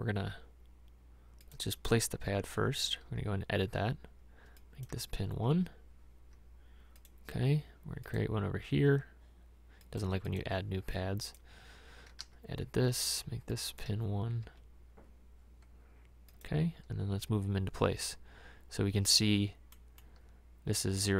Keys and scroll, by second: 3.0 e, 3.1 e, 5.5 i, 12.3 e.